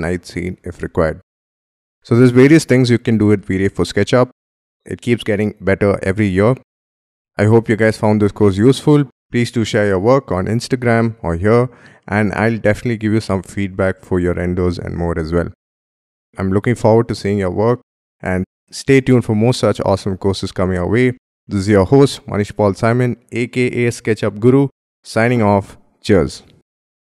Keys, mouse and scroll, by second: 0.9 scroll up 1, 1.4-4.8 scroll down 1.